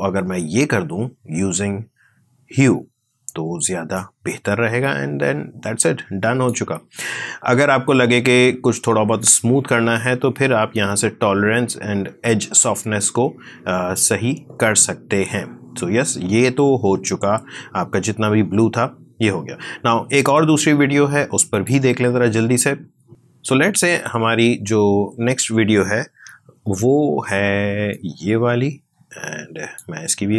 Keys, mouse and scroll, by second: 3.9-6.5 drag, 6.5 space, 19.1 space, 21.4 click, 27.8-30.3 drag.